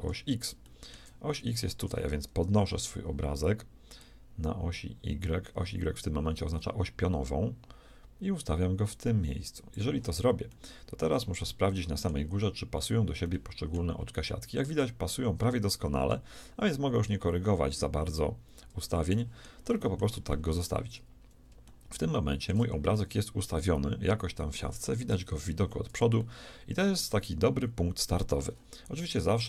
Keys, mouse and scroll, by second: 1.9 shift+middle click, 4.0-6.0 drag, 10.5-15.1 shift+middle drag, 19.2-24.7 middle drag, 25.1 KP_1, 26.3-28.3 middle drag, 29.1-29.4 middle drag.